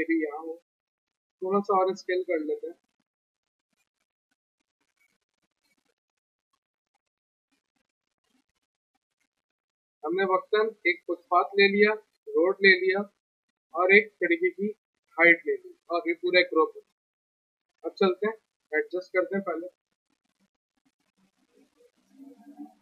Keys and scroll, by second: 0.9 r, 3.1 w, 5.6 p, 7.3 z, 8.3 F3, 16.1 alt+q, 17.5 f, 17.7 z.